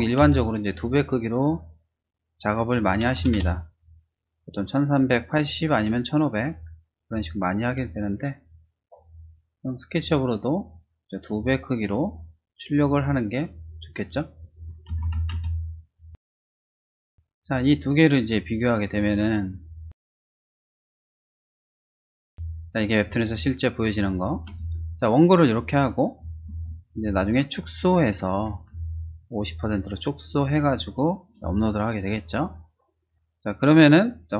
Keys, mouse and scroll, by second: 0.0-0.7 typing, 1.4 click, 2.5-3.8 typing, 5.2 click, 7.1 click, 8.8 click, 13.0-14.1 typing, 16.3 2, 17.6 click, 18.1 click, 18.8 click, 19.0 ctrl+c, 19.5 ctrl+v, 21.9 click, 22.3 space, 22.6 click, 23.0 space, 23.3 click, 24.6 space, 24.9 click, 25.4 click, 27.1 ctrl+-, 28.7 space, 29.2-31.0 drag.